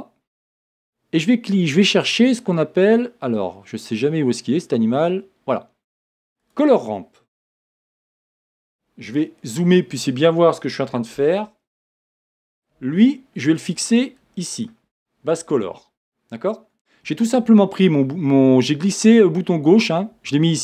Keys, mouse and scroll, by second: 15.6 click, 17.0-20.6 scroll down 2.